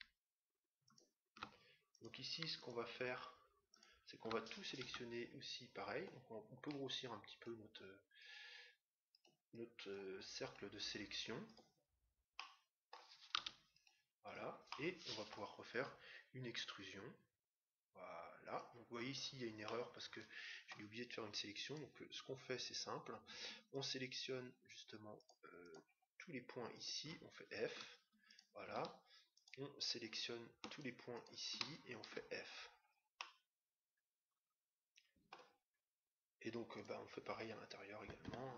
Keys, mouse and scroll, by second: 4.8 c, 12.3-14.0 middle drag, 13.3 c, 14.3-15.8 right drag, 14.7-16.3 middle drag, 15.7 e, 18.4 e, 19.0 scroll up 1, 19.2-21.2 middle drag, 21.9-23.2 right drag, 23.7-32.8 right drag, 27.6 f, 32.0 f, 33.2-34.9 middle drag, 36.7-38.3 right drag.